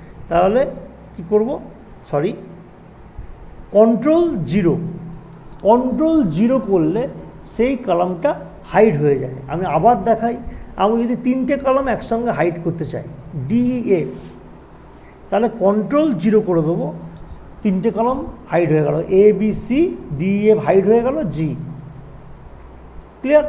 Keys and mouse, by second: 0.1 click, 8.8 ctrl+0, 9.4 ctrl+z, 11.8-15.5 drag, 15.7 click, 16.2 ctrl+0, 21.8 click.